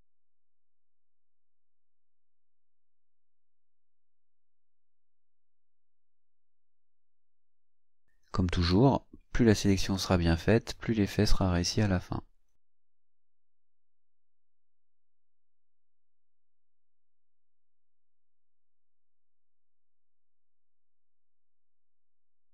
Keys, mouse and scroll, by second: 3.4-6.2 drag, 6.9-8.9 drag, 9.9-15.3 drag, 15.7-17.1 drag, 18.8-19.9 drag, 20.3 click, 21.7 scroll down 2, 22.2 scroll up 2.